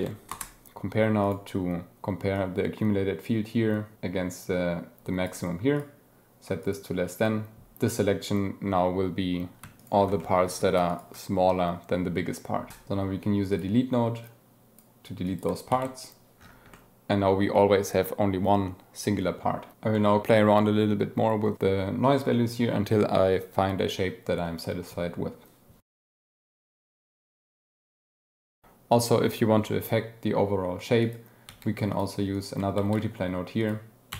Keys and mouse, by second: 1.2 click, 2.3-4.0 drag, 4.3-5.3 drag, 5.7-6.7 drag, 11.6-12.0 drag, 12.7 shift+a, 14.2-14.8 drag, 15.8 ctrl+x, 16.7-17.4 drag, 19.9 click, 26.0 click, 26.2 click, 26.7 shift+click, 27.8 click, 28.3 shift+click, 31.0 click, 31.5 g, 31.9 click, 32.3 click, 32.8 shift+d, 33.9 click.